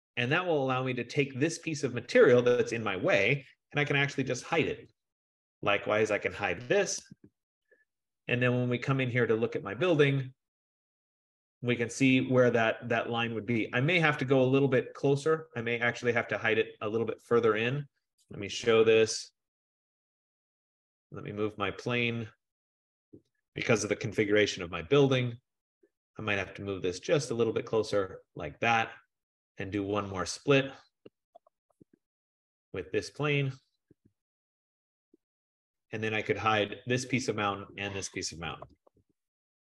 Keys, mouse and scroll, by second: 0.0 click, 0.5 click, 3.9-9.6 typing, 5.8 click, 8.3-10.1 scroll, 10.1-10.5 scroll, 10.7-11.0 scroll, 18.2-19.2 typing, 20.7 click, 21.7-23.5 scroll, 21.7 typing, 23.8-24.8 typing, 25.9 click, 28.4 click, 29.9 click, 30.9-32.3 typing, 33.3 click, 34.0 Return, 35.4 click, 36.6 click, 37.8 shift+click, 38.4-39.7 typing.